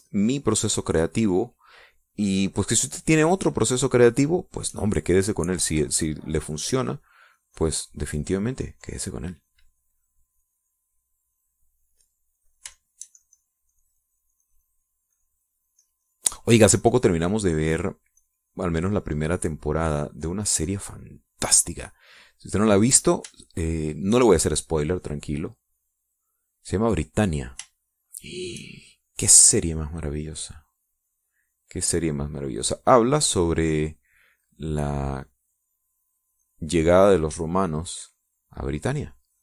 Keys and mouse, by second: 1.7 shift+middle click, 2.2 middle click, 4.5-5.9 shift+drag, 6.4-10.6 drag, 13.0-15.5 drag, 15.5-17.6 shift+middle drag, 17.9-19.0 drag, 19.3-21.0 drag, 21.1 click, 22.3 middle click, 22.8 middle click, 23.3 click, 24.5 shift+click, 25.9-27.5 drag, 28.9 shift+click, 30.8-39.4 drag.